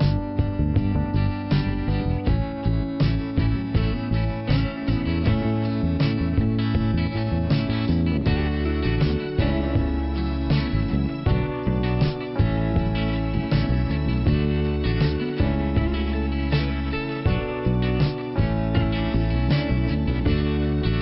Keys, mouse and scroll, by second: 2.7 click, 3.6 double click, 3.6 scroll down 1, 5.2 middle click, 6.1 ', 6.9 click, 7.4 click, 9.6 click, 9.9 double click, 13.5 middle click, 20.3 click, 20.8 click.